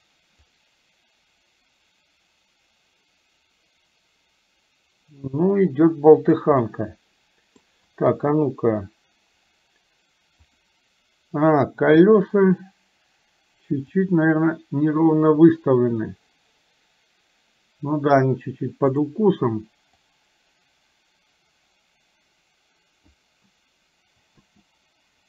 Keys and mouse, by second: 0.6-6.5 drag, 6.6-7.6 middle drag, 8.1 KP_1, 10.5 click, 14.5-18.2 drag, 19.0 click, 20.1 click, 20.5-23.2 drag, 24.4 space.